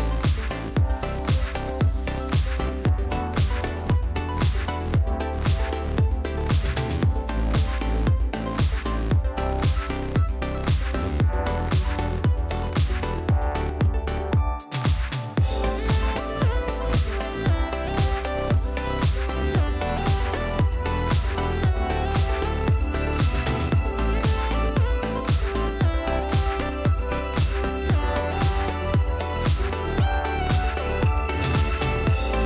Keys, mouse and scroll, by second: 0.2 click, 1.7 click, 2.6 click, 4.0 click, 5.7 click, 10.7 click, 11.2 click, 11.6 click, 14.3 click, 15.4 click, 17.6-19.4 drag, 19.7 click, 20.3 click, 20.9 click, 21.8 click, 23.2-24.3 drag, 27.0 click, 30.1 click.